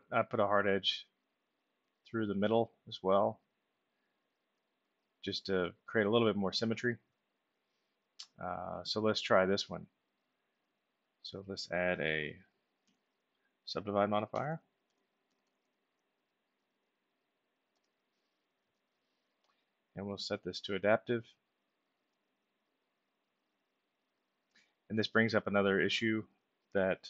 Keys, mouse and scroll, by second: 1.5 click, 3.2 click, 4.9 alt+middle click, 6.8-7.2 middle drag, 7.5-8.8 alt+middle drag, 10.0 click, 11.4 middle click, 14.0-15.4 typing, 17.7 Return, 20.4 click, 21.7 click.